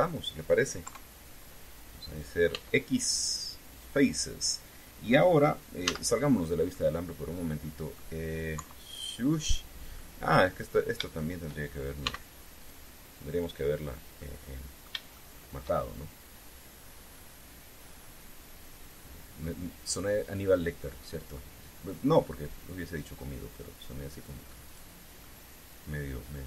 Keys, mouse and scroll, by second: 0.1 shift+right click, 1.6 KP_3, 3.3 x, 4.5 click, 6.6 z, 7.5-8.9 middle drag, 9.3 KP_3, 10.7 middle click, 11.7 shift+right click, 12.8 x, 13.3 click, 14.9 middle click, 15.9 shift+middle click, 16.9-20.3 middle drag, 21.6 middle click, 23.8 click, 25.4 right click, 25.9-26.4 middle drag.